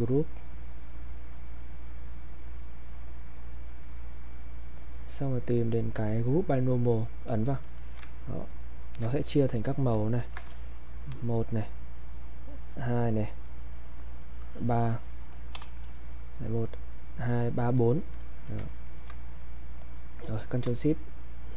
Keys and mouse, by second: 4.1 click, 7.8 alt+click, 8.2 ctrl+right click, 10.2 ctrl+shift+1, 10.7-12.1 drag, 12.1-13.4 drag, 13.4-17.5 drag, 18.2 click, 18.3 alt+click, 18.6 ctrl+right click.